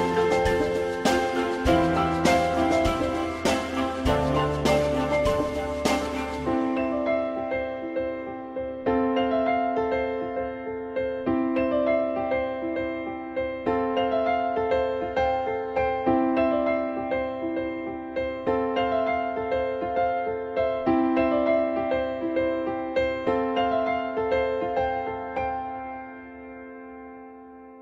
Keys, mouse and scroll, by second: 8.2 e, 11.4 w, 12.4 shift+click, 15.8 ctrl+z, 19.4 shift+click, 22.3 e.